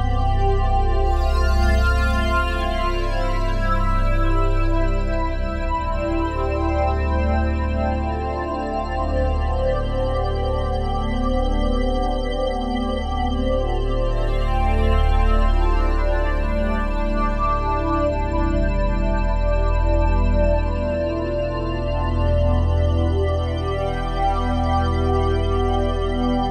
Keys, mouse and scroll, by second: 2.8-4.9 typing, 6.0-8.0 drag, 8.0 s, 8.2 x, 8.7 -, 9.0 1, 9.6-12.0 drag, 10.6 typing, 24.6 alt+shift+click.